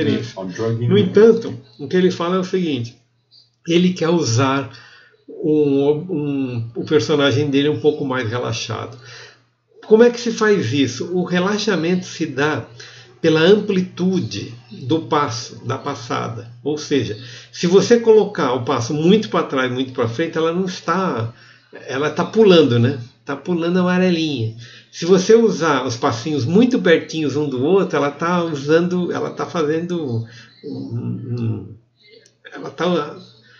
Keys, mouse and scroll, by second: 0.3 click, 0.3 r.